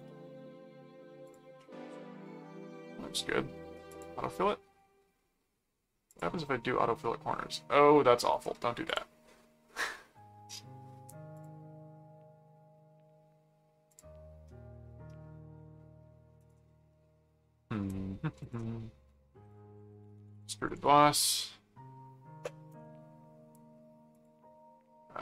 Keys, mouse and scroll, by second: 1.3 click, 1.6-3.3 middle drag, 3.9 click, 6.1 click, 7.0 middle click, 8.3 right click, 8.9 click, 11.3 click, 13.9 click, 14.7-16.2 middle drag, 16.4 click, 16.9-18.2 middle drag, 18.4 ctrl+click, 18.9 ctrl+4, 19.5 click, 19.5-21.2 typing, 22.7 Return, 24.1 click.